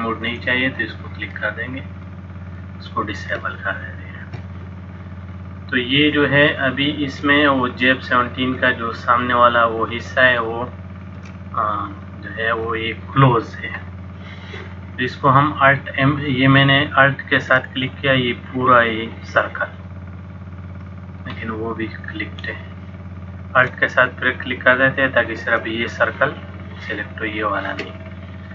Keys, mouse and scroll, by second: 0.4 click, 1.5 middle click, 3.5 shift+middle click, 5.3 middle click, 7.3 shift+middle click, 7.6 middle click, 12.0 alt+click, 18.0 alt+click, 21.0 middle click, 22.5 click, 24.9 alt+click.